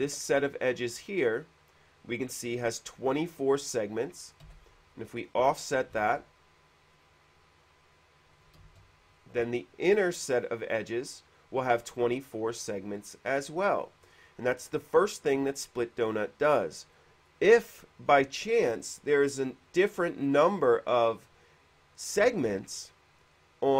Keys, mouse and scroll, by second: 1.5 click, 4.3 middle click, 5.1 click, 6.4 ctrl+z, 6.4 f, 7.1 click, 9.0 ctrl+z, 9.0 space, 9.0 f, 10.7 click, 12.0 space, 12.9 space, 15.7 click, 17.2 middle click.